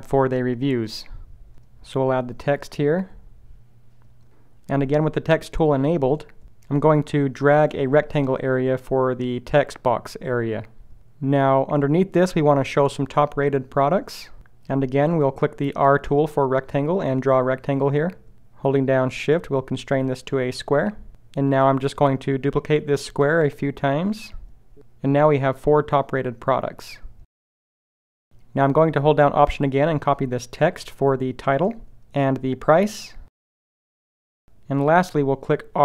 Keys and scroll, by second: 13.6 s, 15.3 r.